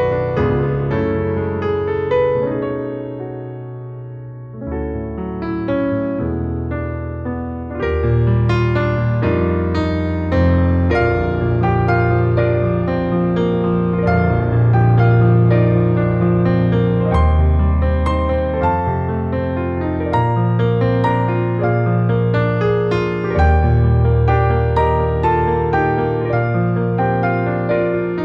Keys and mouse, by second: 0.2 Tab, 1.2 click, 1.6 click, 2.3 3, 2.4 click, 3.2 i, 7.1 e, 9.9 click, 10.2 alt+middle click, 11.2 KP_1, 12.2 click, 13.2 r, 14.8 click, 15.3 g, 15.6 z, 19.7 click, 20.1 r, 21.0 click, 21.4 g, 21.6 z, 22.8 click, 23.1 alt+middle click, 23.8 Tab, 24.3 Tab, 25.5-26.8 alt+middle drag, 27.2 alt+middle click.